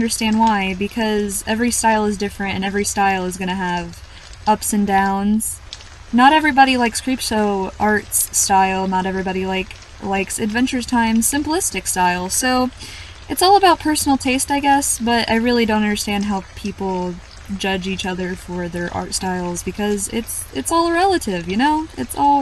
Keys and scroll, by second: 7.4-7.7 scroll down 1, 7.7-8.3 scroll up 1, 8.6-9.0 scroll down 1, 9.7-10.1 scroll down 1, 11.2-11.6 scroll down 1, 13.6-13.9 scroll down 1, 16.3 scroll up 1, 18.3 scroll down 1, 19.1 scroll down 1.